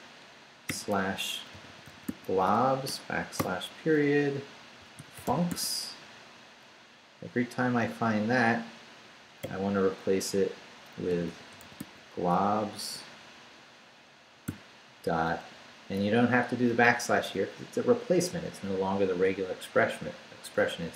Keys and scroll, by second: 0.0-3.4 typing, 4.5-6.0 typing, 9.4 /, 10.9-12.3 typing, 14.5 ..